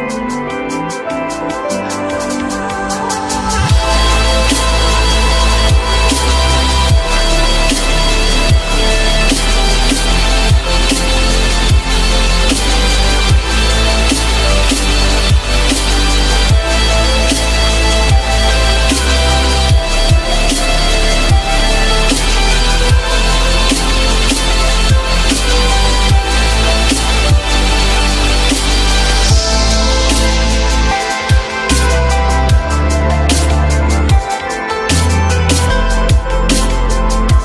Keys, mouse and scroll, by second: 0.1 s, 8.4 ctrl+z, 32.9 F3.